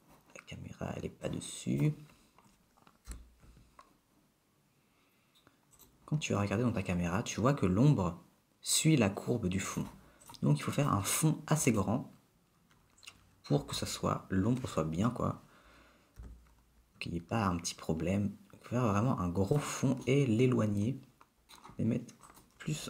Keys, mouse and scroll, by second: 1.4 click, 3.3 g, 9.8 click, 10.5 click, 11.9 click, 13.8 g, 16.4 g, 20.4 middle click, 21.1 middle click, 21.5 middle click, 22.5 click.